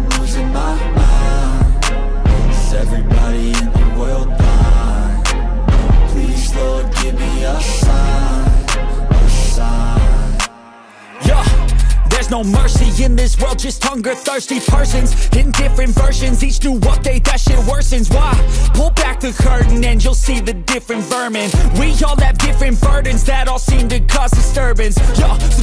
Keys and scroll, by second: 0.2 ctrl+alt+z, 1.2 ctrl+=, 3.0 ], 4.8 ctrl+alt+z, 5.8 ], 6.7 ctrl+-, 7.6 ctrl+alt+z, 8.9 ctrl+-, 10.8 ctrl+-, 11.0 space, 11.5 ctrl+-, 11.7 ], 12.5 ], 13.7 ], 19.1 ctrl+alt+z, 23.5 ctrl+=, 24.6 ctrl+=.